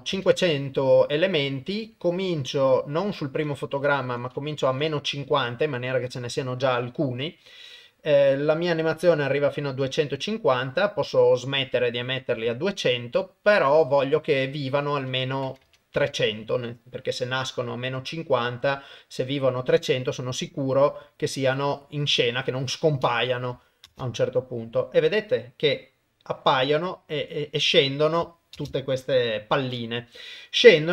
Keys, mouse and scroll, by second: 3.6-5.4 drag, 14.8-16.1 drag, 15.7 KP_0, 23.9 shift+space, 28.6 shift+space, 29.4 shift+Left.